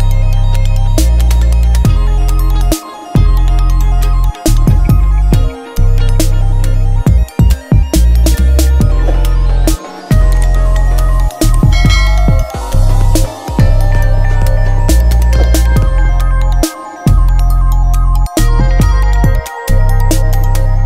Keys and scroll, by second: 0.0-0.4 typing, 2.8-4.8 typing, 6.2 BackSpace, 9.6 Up, 11.3 BackSpace, 11.8 -, 12.2 Left, 12.9 BackSpace, 13.2 -, 13.9 Return.